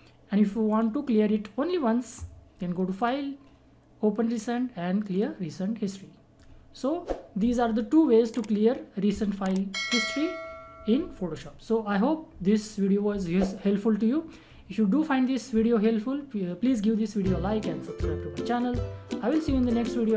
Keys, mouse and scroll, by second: 0.7 click, 2.9 click.